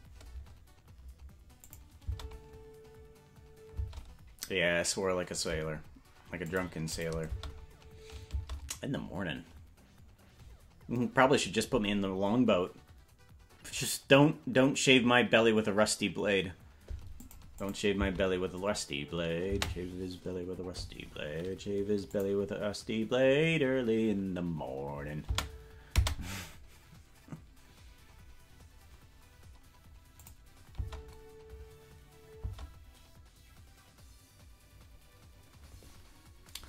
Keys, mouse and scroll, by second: 1.6 click, 3.8 space, 6.5 click, 6.9 click, 7.2 space, 8.4 space, 17.2 click, 17.6 click, 17.9 space, 19.5 space, 22.1 click, 26.0 space, 30.2 click, 30.7 space, 32.4 space.